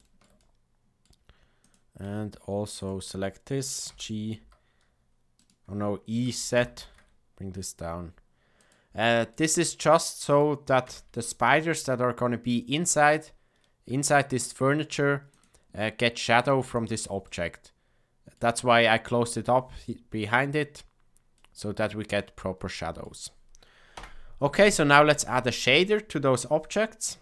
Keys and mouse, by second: 0.0 shift+middle click, 0.3 middle click, 1.6 click, 3.8 g, 6.2 e, 9.3-10.4 middle drag, 10.8 Tab, 15.7-16.3 middle drag, 16.7 click, 17.2-18.3 middle drag, 21.3-22.1 middle drag, 22.7-23.0 shift+middle drag, 23.9 KP_0, 26.7 click.